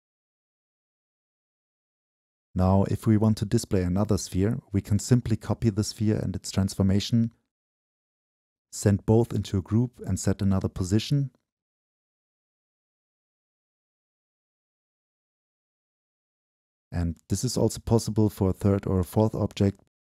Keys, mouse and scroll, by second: 0.0-3.1 drag, 3.4-6.2 drag, 6.2 ctrl+c, 6.3 click, 6.4 ctrl+v, 6.7-7.2 drag, 7.3-8.9 scroll down 2, 10.3-15.7 drag, 15.7 middle click, 15.7-16.0 scroll down 2, 16.0-16.4 drag, 16.4-16.9 middle drag, 16.4-16.9 scroll down 2, 16.9-18.7 right drag, 18.7-20.1 drag.